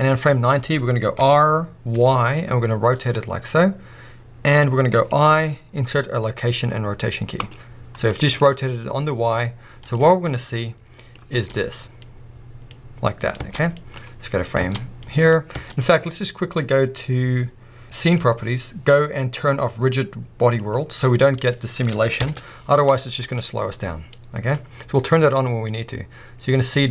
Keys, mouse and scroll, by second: 0.1 middle drag, 1.1 r, 4.9-9.9 middle drag, 5.1 click, 9.9-22.2 drag, 11.3 space, 13.4 space, 14.6 space, 15.6 space, 22.2 shift+Left, 23.2 space.